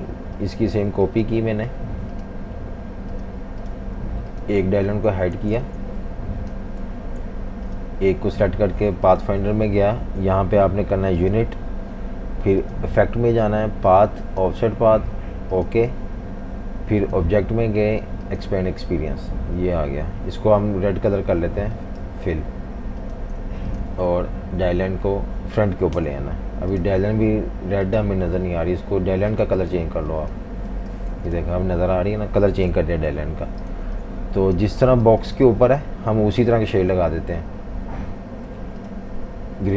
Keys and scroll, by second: 4.8 super+3, 5.3-6.8 typing, 23.4 typing, 24.4 alt+super+3, 25.9 shift+super+], 31.1 v, 32.7 super+-, 32.9 super+-, 33.1 super+-, 33.7-35.0 typing.